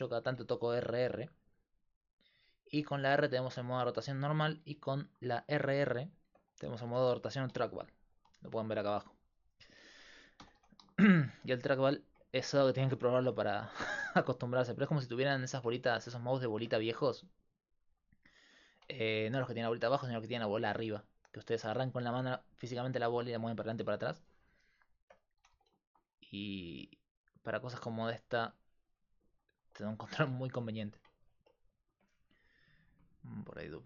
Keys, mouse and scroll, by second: 3.0 r, 6.9 r, 9.4-11.5 drag, 10.4 r, 12.0-13.6 middle drag, 13.6 r, 17.0 r, 19.6 r, 24.7-27.8 middle drag, 25.4 r, 27.8 r, 28.0 click, 31.5 middle click, 33.7-33.8 right drag.